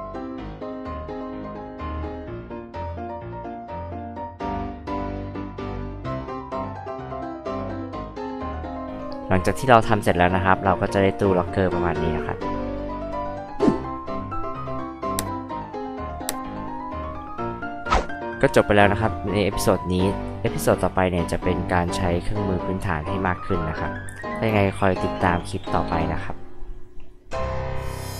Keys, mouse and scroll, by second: 0.2 click, 0.6 click, 0.7 space, 0.8 click, 1.1 m, 1.3 click, 1.4 scroll up 2, 1.7 click, 1.9 space, 1.9 scroll down 2, 1.9 click, 2.5 click, 3.8 click, 3.9 space, 3.9 click, 4.1 m, 4.4 ctrl+click, 4.8 ctrl+click, 5.2 j, 5.4 click, 5.7 space, 5.7 click, 6.1 m, 6.3 click, 6.6 click, 6.9 ctrl+click, 7.3 ctrl+click, 7.6 click, 8.3 drag, 26.6-27.5 scroll up 2, 27.9 click.